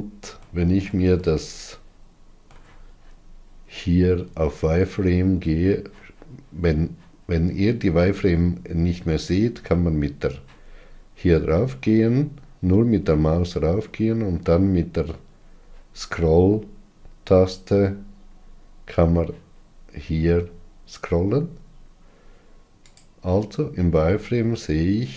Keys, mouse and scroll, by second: 0.9-23.3 ctrl+middle drag, 23.3 click, 24.3 scroll up 3.